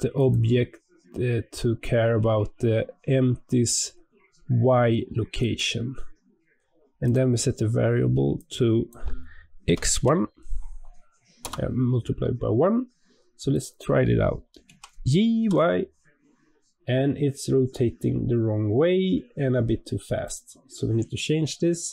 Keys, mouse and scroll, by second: 13.4 click, 14.5 g, 21.8 click.